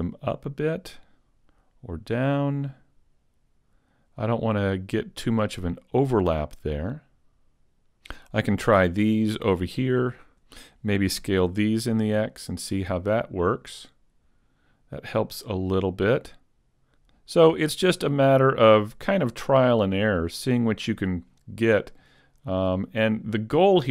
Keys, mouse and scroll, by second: 7.7 z, 7.7 a, 8.8 right click, 10.3 shift+right click, 11.3 s, 20.4 click, 21.1-21.7 scroll down 1, 21.7 middle click, 21.7 scroll down 1.